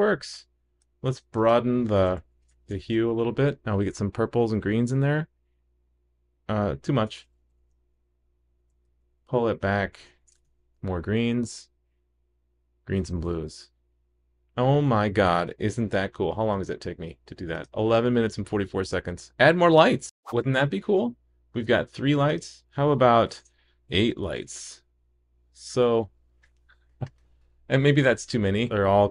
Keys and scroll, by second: 2.7 super+s, 7.6 super+s, 10.4 super+s, 24.5 super+s.